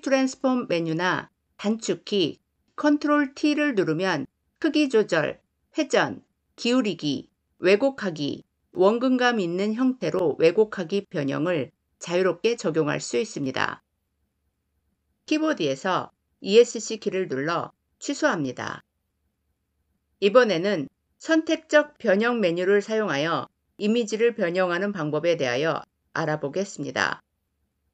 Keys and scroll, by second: 2.4 ctrl+t, 16.1 Escape.